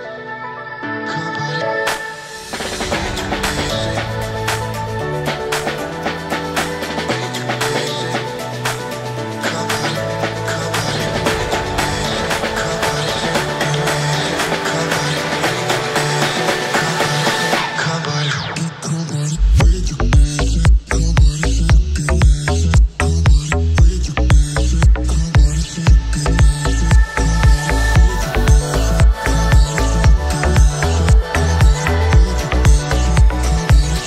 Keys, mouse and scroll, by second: 0.2 w, 2.1 drag, 2.9-4.4 drag, 4.4 right click, 5.4 a, 5.8 w, 7.1 middle click, 7.6 Tab, 8.0-8.7 shift+middle drag, 8.7 shift+a, 10.6 middle click, 11.0-11.5 scroll up 1, 11.5 g, 12.6-12.9 scroll down 1, 12.9-14.4 middle drag, 14.4-15.0 scroll up 2, 15.0-16.9 middle drag, 16.9 right click, 19.5 click, 20.9 click, 22.5-26.2 drag, 26.2-26.7 scroll down 3, 26.8-27.7 scroll down 1, 27.7-30.7 drag.